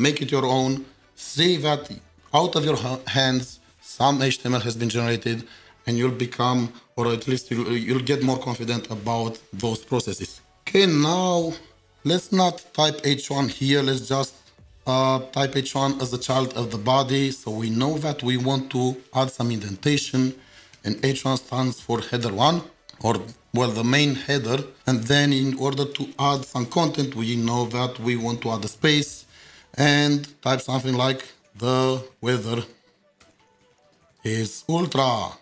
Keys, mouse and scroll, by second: 13.4 Return, 19.6 Return, 20.7 Tab, 21.0 typing, 23.5 typing, 26.0-26.8 typing, 31.0-35.4 typing.